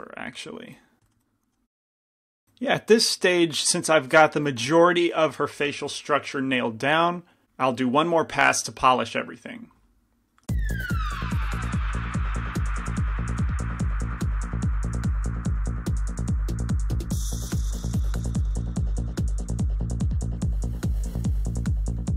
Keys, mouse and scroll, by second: 12.0 g, 12.0 f, 12.1-15.5 drag, 12.3 f, 12.9 f, 14.5 f, 15.1-16.8 middle drag, 16.8-19.2 typing, 18.5 click, 18.5-20.1 right drag, 20.0 click, 21.1 shift+x, 21.1 shift+c, 21.1 f.